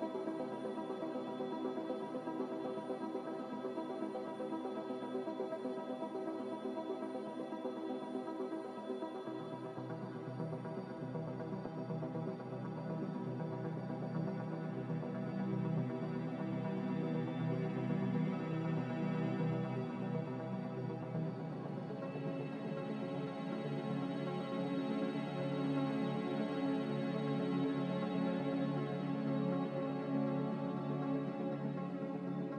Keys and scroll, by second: 24.2 s, 26.8 a.